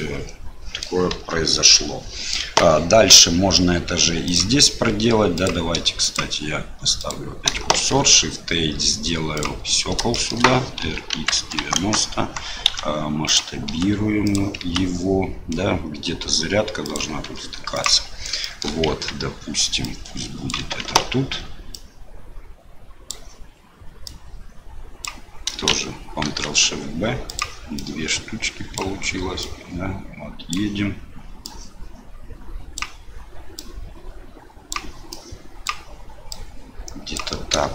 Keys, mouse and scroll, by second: 1.1 KP_7, 2.4 KP_1, 5.4 click, 6.1 click, 7.7 shift+a, 10.2 shift+click, 10.8 r, 12.6 s, 13.6 s, 14.6 s, 17.2 s, 18.5 shift+middle click, 18.8 Tab, 19.9 click, 20.8 ctrl+z, 21.7-23.1 drag, 24.1 click, 26.2 ctrl+shift+b, 27.8-29.3 drag, 29.6 click, 31.4-32.7 drag, 33.5-34.7 drag, 35.2 click, 36.3 click.